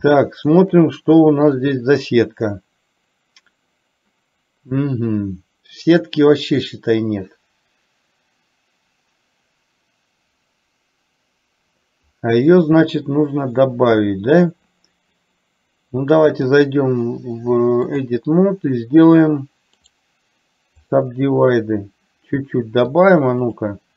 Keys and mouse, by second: 0.3-0.8 shift+middle drag, 1.8 click, 16.5-18.4 drag, 19.9-21.3 right drag, 23.0 click.